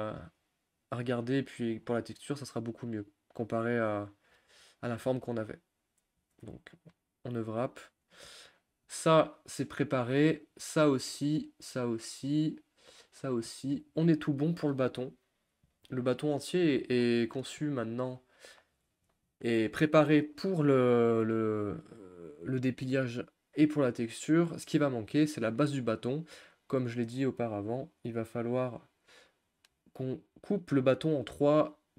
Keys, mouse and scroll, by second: 2.8 ctrl+z, 7.1 u, 8.6 click, 11.0 click, 13.1 click, 13.5-14.8 middle drag, 14.8-16.4 scroll down 1, 16.4 Tab, 16.9 click, 17.0 scroll down 1, 17.1-18.1 middle drag, 18.1 Tab, 18.6-19.2 scroll down 1, 19.2-30.8 shift+middle drag, 30.8-31.4 scroll up 1, 31.4-31.9 scroll down 1.